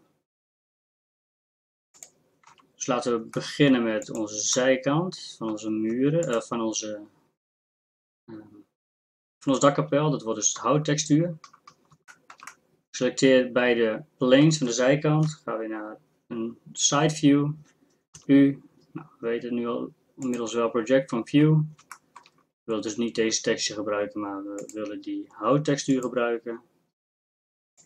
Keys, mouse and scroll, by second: 2.5 Tab, 10.3-11.6 middle drag, 15.3 KP_3, 18.1 u.